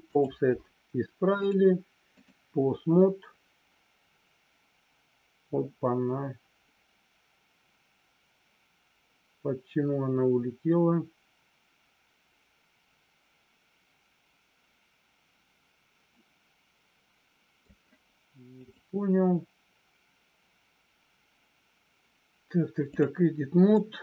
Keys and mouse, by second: 1.3-2.3 drag, 3.0-17.5 middle drag, 18.6-23.0 drag, 23.7 middle click.